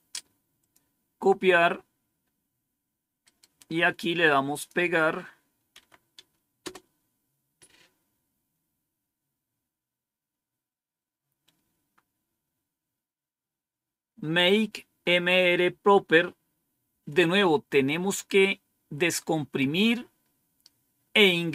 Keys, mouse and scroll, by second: 0.5 click, 3.2 right click, 3.7 right click, 4.4 click, 5.6 Right, 6.5 Return.